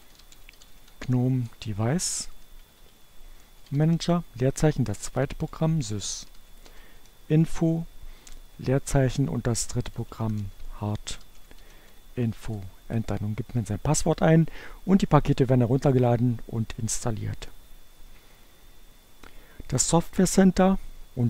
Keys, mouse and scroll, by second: 0.0-3.7 typing, 4.8-7.7 typing, 9.8-11.4 typing, 12.6 Return.